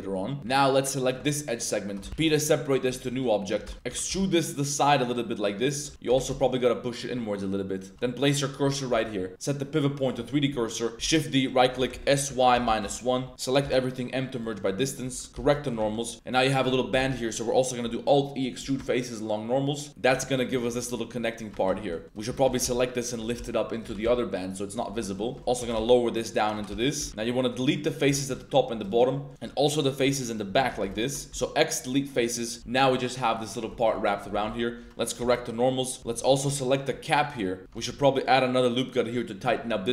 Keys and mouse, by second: 0.4 1, 1.4 middle click, 1.4 click, 1.6 middle click, 2.1 p, 2.9 Tab, 3.1 click, 3.6 Tab, 3.7 y, 3.8 g, 4.0 y, 5.7 click, 5.9 x, 6.0 g, 7.9 shift+s, 8.7 shift+click, 9.0 a, 9.3-10.1 drag, 10.9-13.6 typing, 12.8 Return, 15.3 shift+n, 15.9 Tab, 15.9 drag, 16.0 middle drag, 16.1 alt+e, 17.1 alt+e, 20.3 middle click, 20.6 shift+middle click, 20.7 Tab, 21.2 click, 21.5 shift+click, 21.7 Tab, 21.9 click, 22.0-24.0 typing, 22.2 shift+right click, 23.0 click, 24.6 click, 25.0 middle click, 25.2 shift+click, 25.4-27.1 typing, 28.1 b, 28.7 1, 28.8 shift+click, 29.1 shift+click, 29.4 3, 30.2 alt+shift+click, 30.8 ctrl+shift+z, 30.9 ctrl+shift+click, 31.3 x, 31.9 click, 32.6 z, 32.7 Tab, 33.3 drag, 33.7 shift+click, 34.3 Tab, 34.5-36.9 typing, 36.0 click, 36.4 shift+click, 36.6 click, 37.1 click, 37.6 Tab, 38.0 ctrl+r, 39.6 Tab, 39.7 drag.